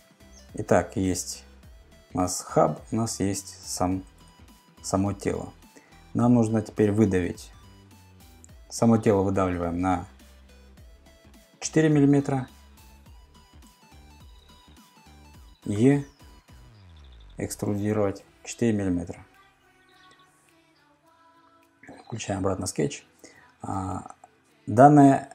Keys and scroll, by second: 4.2 super+Tab, 13.8 super+Tab, 15.8 e, 18.2 4, 19.3 Return.